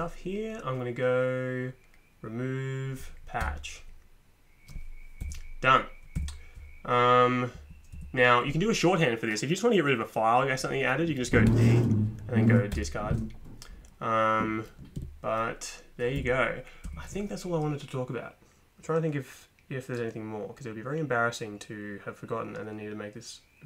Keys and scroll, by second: 3.4 Return, 5.2 Up, 6.2 Down, 7.6 Up, 7.9 Down, 11.5 d, 12.7 Return, 15.0 ⟲, 16.1 Down, 16.8 Up.